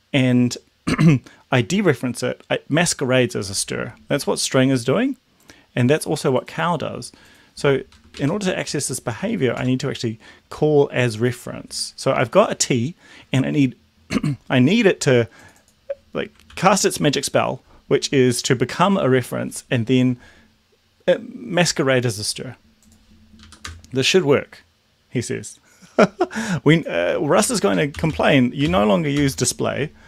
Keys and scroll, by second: 8.1 ctrl+Right, 8.4 ., 9.1 a, 9.5 Tab, 16.5 ctrl+s, 23.5 Up, 23.7 Return, 27.5 Up, 27.9 ctrl+/, 29.1 ctrl+s.